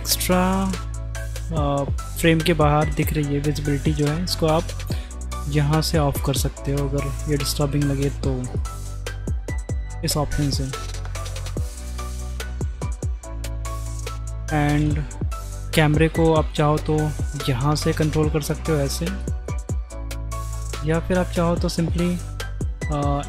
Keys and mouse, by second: 4.8 click, 8.5 click, 10.0 click, 13.2 ctrl+click, 13.9 shift+click, 16.5-16.9 drag, 18.7-19.2 drag, 19.6 middle click, 20.6-21.0 drag.